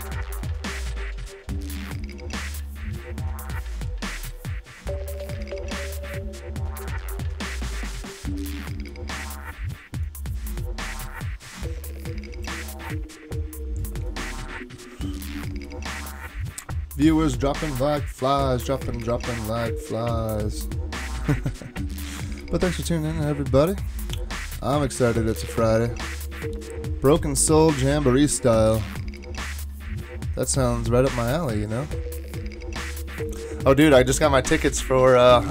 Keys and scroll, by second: 17.7 super+Tab, 18.2 super+Tab, 18.4 super+Tab.